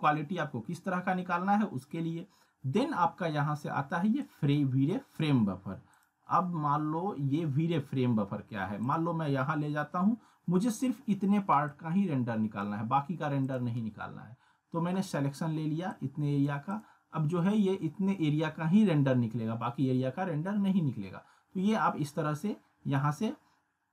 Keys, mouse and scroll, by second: 8.8 click, 11.7-12.6 drag, 17.3-18.0 scroll up 1.